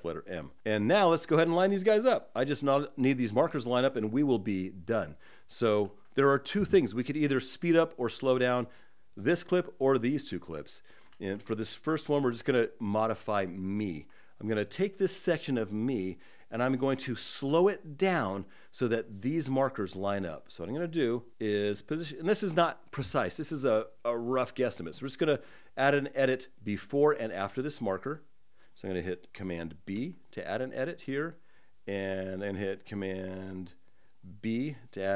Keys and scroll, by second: 1.5 shift+z, 10.8 shift+z, 29.6 super+b.